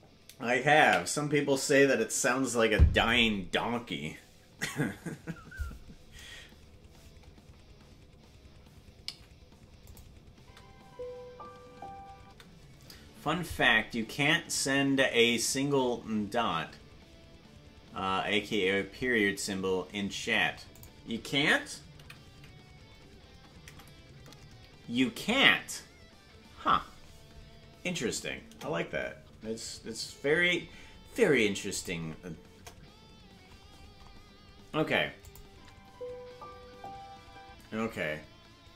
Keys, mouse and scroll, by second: 9.8 click, 10.3 space, 32.5 KP_0, 34.0-35.2 scroll up 2, 35.2 click, 35.2 scroll up 1, 35.4 space, 37.5 space.